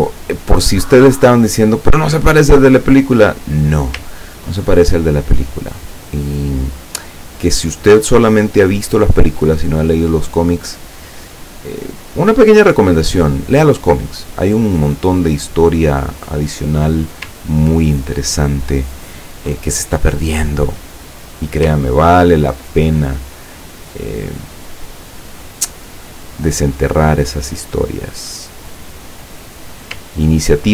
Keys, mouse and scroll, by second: 1.0-3.0 drag, 3.4 click, 4.2-4.8 ctrl+scroll up 2, 5.8 click, 7.3 click, 8.0 click, 9.9 click, 10.6-12.6 drag, 14.2 click, 15.2-17.1 drag, 17.5-18.1 ctrl+scroll down 2, 18.7 ctrl+scroll down 2, 20.0-21.5 ctrl+drag, 21.9-22.2 ctrl+scroll down 2, 24.0 click, 27.1 click, 29.1 click, 30.2-30.7 ctrl+scroll down 2.